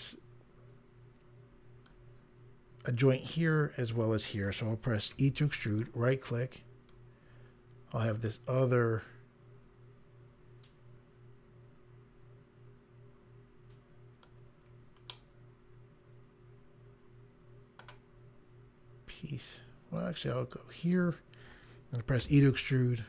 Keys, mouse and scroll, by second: 5.1 e, 5.6 right click, 6.9 click, 15.1 middle click, 19.1 click, 22.2 e.